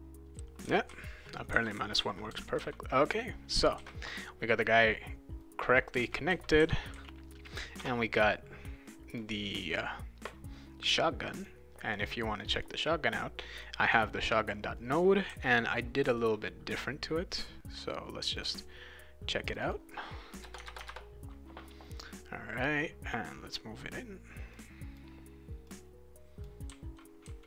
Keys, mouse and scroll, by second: 0.0-3.1 typing, 0.0 click, 0.3-3.2 right drag, 3.8 ctrl+s, 5.4-7.5 right drag, 5.7-7.4 typing, 9.1 click, 11.4 click, 12.4 click, 12.6 click, 13.6 click, 14.8 right click, 15.3 d, 16.2 click, 18.3 click, 19.5 click, 19.6 click, 20.5 Tab, 20.8 Tab, 23.1 click, 24.5 click, 25.6 click, 26.6-27.4 right drag, 26.7-27.4 typing.